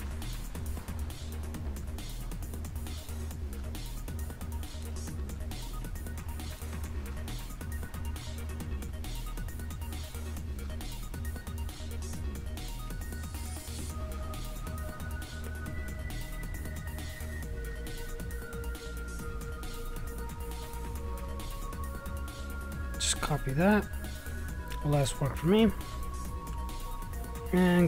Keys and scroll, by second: 1.7-3.9 typing, 7.3-9.9 typing.